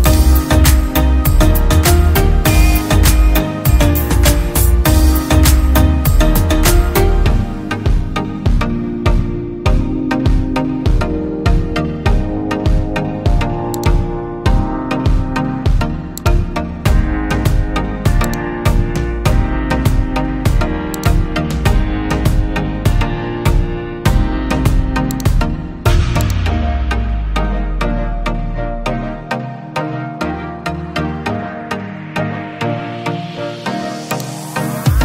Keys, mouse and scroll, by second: 3.2-6.3 typing, 3.3 right click, 3.7 right click, 6.1 right click, 7.1 right click, 7.3-11.1 typing, 8.6 right click, 8.9 right click, 10.6 right click, 15.4 right click, 22.3 right click, 28.5-31.2 typing, 32.5-32.9 typing, 32.9-35.0 drag.